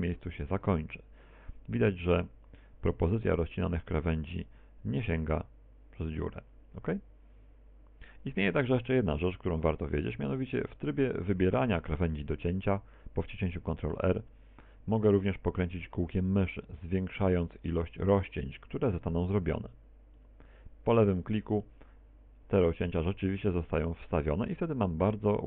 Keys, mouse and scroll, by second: 0.1 ctrl+r, 20.2 click, 21.6 middle click, 23.6 a, 24.1 middle click.